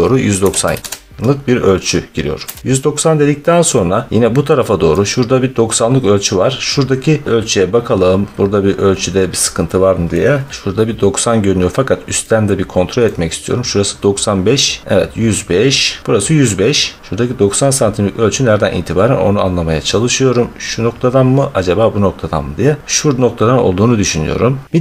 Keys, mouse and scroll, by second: 0.3-0.8 typing, 2.3 Return, 4.1 middle click, 4.3 scroll, 4.8 scroll, 7.3-7.7 scroll, 8.1-8.7 scroll, 10.5 scroll, 11.4 scroll, 12.9-13.5 scroll, 14.9-15.4 scroll, 16.1 middle click, 17.0 middle click, 18.2 scroll, 24.7 scroll.